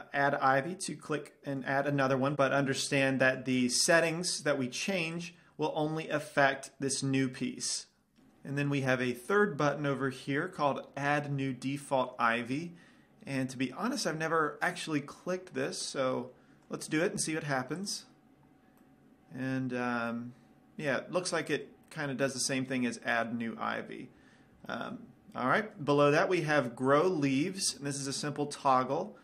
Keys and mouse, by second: 0.0-1.8 drag, 2.3 middle click, 5.5-8.3 drag, 8.3-16.0 middle drag, 17.9-20.0 drag, 19.8-21.2 middle drag, 23.8 middle click, 28.8-29.2 middle drag.